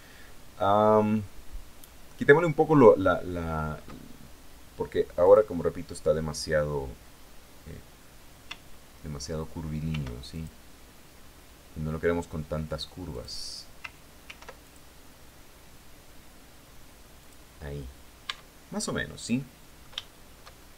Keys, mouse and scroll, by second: 4.6 click, 9.3 ctrl+r, 9.8 ctrl+click, 12.5 click, 13.7 ctrl+r, 14.1 ctrl+click, 16.6 click, 17.7 Tab, 18.2 scroll down 1, 18.5-20.0 drag, 20.3 scroll up 2.